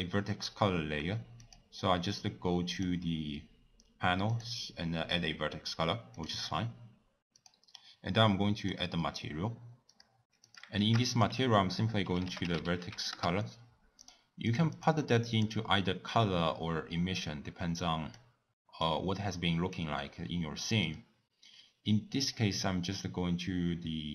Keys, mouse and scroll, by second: 1.4 click, 2.7-3.0 drag, 4.3 click, 5.2 click, 6.3 click, 7.3-10.0 drag, 14.5 click, 18.1-19.7 drag, 20.8 click, 23.9-24.1 middle drag.